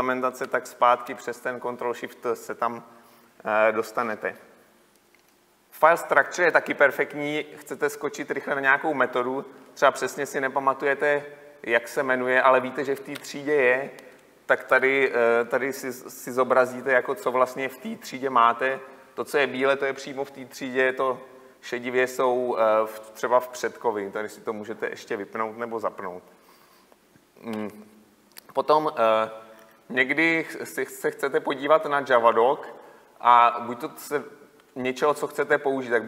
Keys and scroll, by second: 0.5 ctrl+shift+t, 13.9 ctrl+F12.